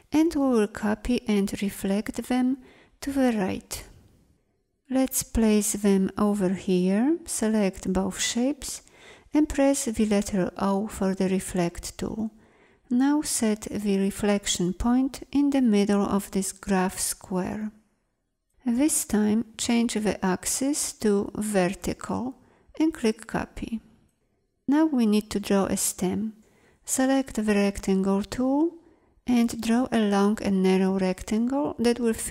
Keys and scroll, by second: 10.6 o, 27.3 m.